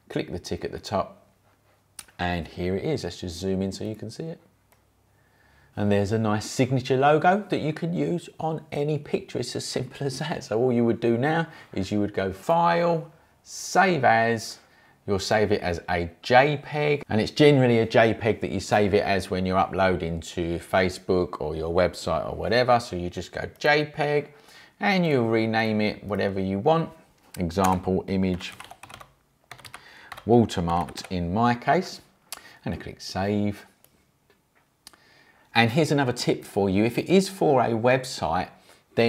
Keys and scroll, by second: 27.5-31.4 typing.